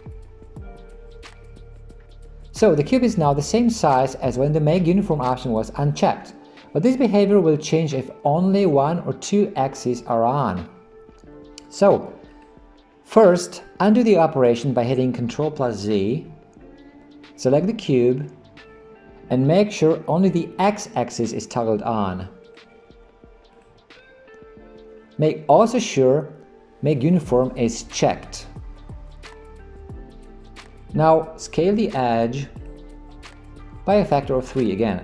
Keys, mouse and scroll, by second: 16.2 ctrl+z, 18.0 click, 22.5 click, 23.6 click, 32.6 click.